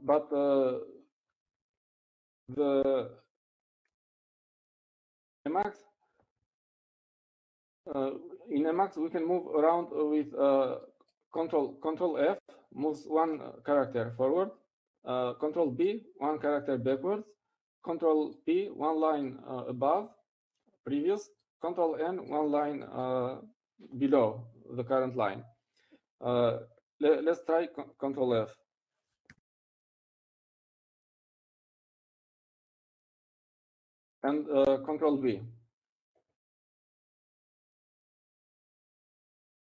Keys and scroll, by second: 33.6 ctrl+f, 34.5 ctrl+f, 35.0-36.1 ctrl+f, 36.6 ctrl+f.